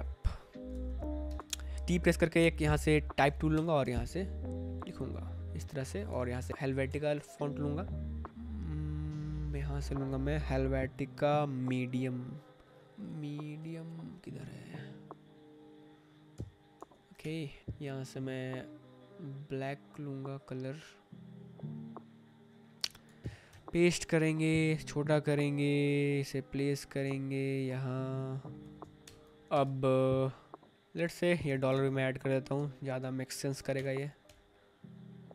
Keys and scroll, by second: 0.5 Tab, 1.3 Tab, 1.7 t, 3.1 ctrl+v, 3.4 Escape, 3.8 v, 6.4 h, 6.8 BackSpace, 16.3 Escape, 16.9 space, 17.3 Tab, 22.7 Escape, 23.2 ctrl+c, 23.5 Escape, 24.1 ctrl+t, 27.0 ctrl+z, 29.0 Return, 29.3 space, 29.5 Tab, 31.4 ctrl+c, 32.4 Tab, 32.5 t, 33.4 ctrl+v, 33.6 Escape.